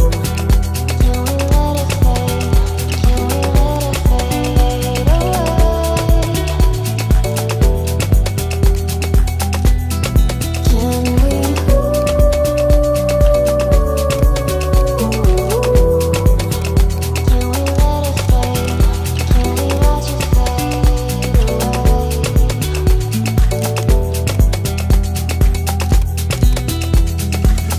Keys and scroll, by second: 5.2 Delete, 8.3 ctrl+z, 11.6 Delete.